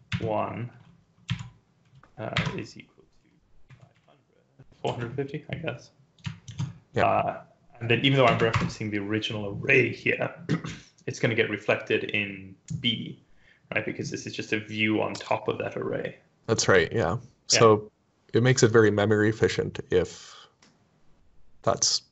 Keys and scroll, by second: 1.3-4.9 typing, 6.5 ctrl+s, 8.3 Up, 8.5 Return.